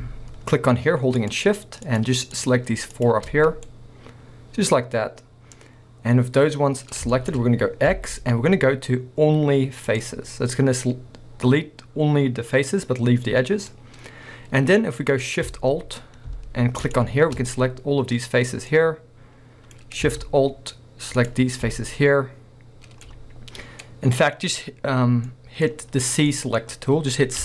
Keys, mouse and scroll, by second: 1.2 shift+click, 1.8 shift+click, 2.4 shift+click, 2.9 shift+click, 3.4 scroll down 2, 3.7-7.2 middle drag, 7.7 scroll up 1, 7.9 x, 12.8-13.7 scroll up 1, 13.7 middle click, 16.8 alt+shift+click, 18.3-18.6 scroll down 1, 18.7-19.8 middle drag, 19.8 scroll up 1, 21.2 alt+shift+click, 21.9-27.4 middle drag, 24.3-25.3 scroll up 2.